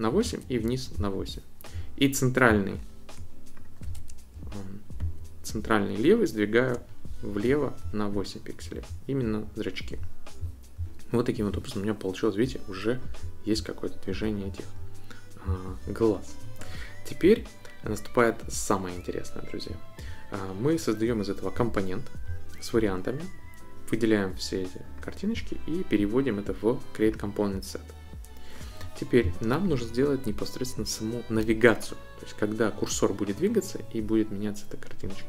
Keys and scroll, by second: 0.4 shift+Down, 5.0 shift+Left.